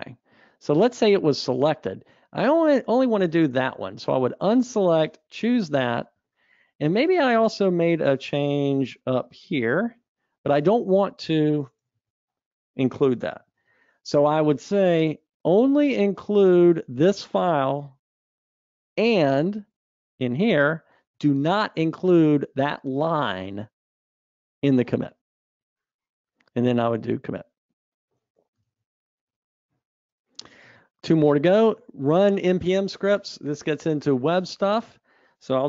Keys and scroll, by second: 13.7 ctrl+v, 28.9 super+Up.